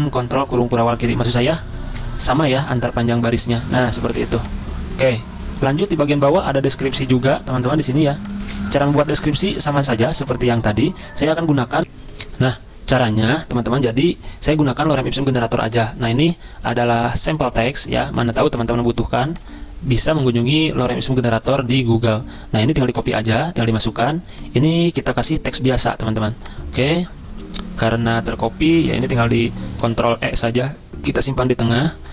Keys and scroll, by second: 0.4 ctrl+], 0.5 ctrl+], 0.6 ctrl+], 0.8 ctrl+], 1.0 ctrl+], 9.2 BackSpace, 9.8 BackSpace, 10.0 Return, 11.6-12.3 typing, 20.7 alt+Tab, 21.5 alt+Tab, 21.6 alt+Tab, 22.9 ctrl+v, 29.8 ctrl+e.